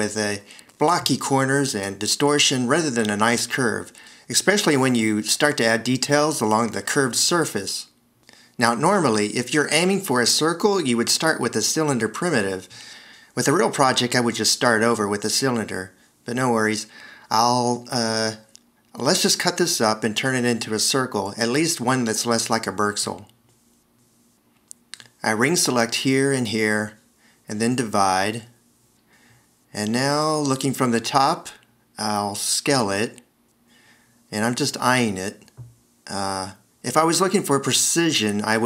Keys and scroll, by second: 2.8 s, 5.9 alt+r, 8.2 shift+x, 11.2 alt+r, 12.7 shift+x, 19.7 alt+e, 24.5 c, 32.5 0.